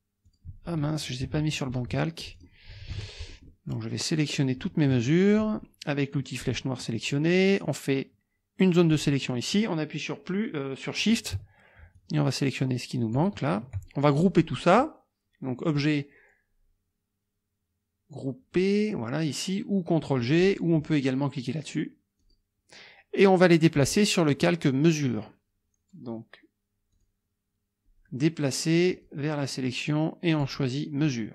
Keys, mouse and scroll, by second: 0.2 click, 1.2 KP_Subtract, 2.2 click, 2.9 KP_Subtract, 3.5 click, 4.4-5.5 drag, 6.4 click, 7.3-9.1 drag, 12.0-13.4 shift+drag, 15.7 click, 20.4 click, 22.2 click, 27.0 click, 28.9 click, 30.3 click.